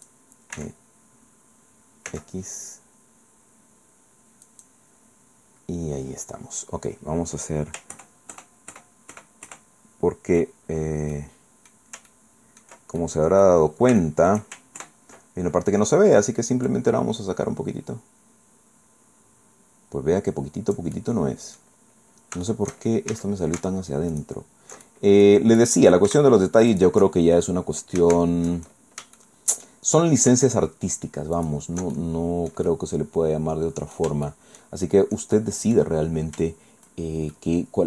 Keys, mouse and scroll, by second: 0.5 e, 2.1 x, 4.5 click, 7.9 ctrl+KP_Add, 10.8 ctrl+scroll down 3, 11.1 click, 12.1 ctrl+click, 13.0 ctrl+click, 13.7 scroll up 2, 14.0 shift+click, 14.3 shift+scroll up 2, 14.8 ctrl+shift+KP_Add, 16.7-21.8 drag, 21.9 middle click, 22.5 shift+click, 23.1 shift+a, 24.1 alt+shift+right click, 24.9 alt+shift+middle click, 25.6 shift+middle click, 26.7 alt+shift+right click, 27.1 alt+shift+scroll down 2, 28.7-29.1 alt+shift+scroll up 2, 29.2 shift+middle click, 29.2 shift+click, 31.4 alt+shift+right click, 31.9-34.1 alt+shift+middle drag, 34.3 shift+middle click, 35.3 shift+middle click, 37.0 shift+middle click, 37.3-37.8 drag.